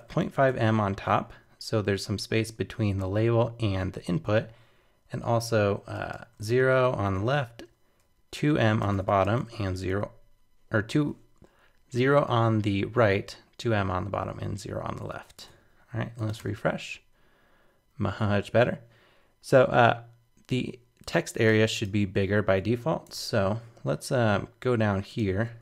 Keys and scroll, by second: 15.1 super+s, 15.4 super+Tab, 16.4 super+r, 23.1 super+Tab.